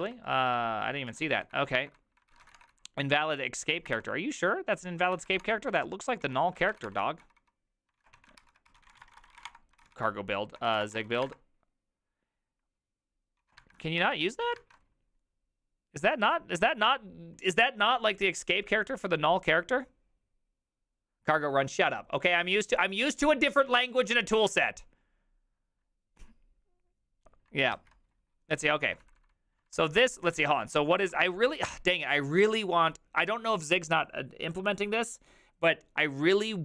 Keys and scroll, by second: 0.0 alt+{, 1.0-11.7 typing, 6.6 ctrl+c, 6.7 ctrl+:, 6.8 Return, 8.0 ctrl+a, 8.4 ctrl+c, 13.4 ctrl+a, 13.6-14.5 typing, 14.6 alt++, 27.7 alt+{, 28.6 ctrl+c, 28.7-31.9 typing, 31.1 ctrl+c.